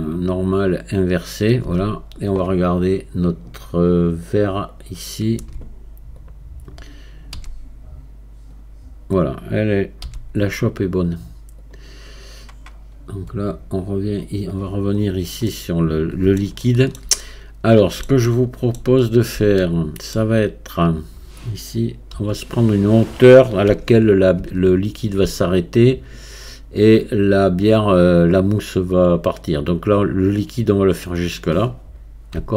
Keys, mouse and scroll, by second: 1.7 Tab, 2.0-2.4 scroll down 1, 4.3-7.4 drag, 7.4 q, 13.8-15.0 drag, 15.0-15.5 scroll up 1, 15.5-19.0 middle drag, 19.0-19.6 scroll down 1, 19.6-22.2 shift+middle drag, 22.2 KP_1, 23.7 Tab, 26.4 scroll up 2.